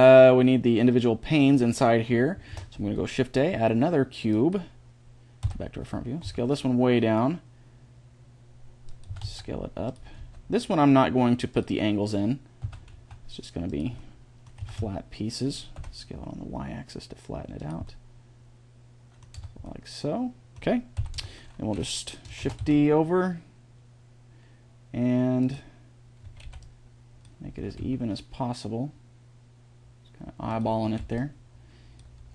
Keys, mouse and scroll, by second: 2.3 shift+a, 5.3 KP_1, 6.1 s, 8.9 s, 10.0 g, 12.5 s, 13.9-15.6 middle drag, 14.4 s, 17.8 middle click, 19.2 Tab, 20.8 KP_1, 20.9 Tab, 22.3 shift+d, 26.1 a, 26.3 b, 27.4 g, 30.8 a, 30.8 b, 32.0 g.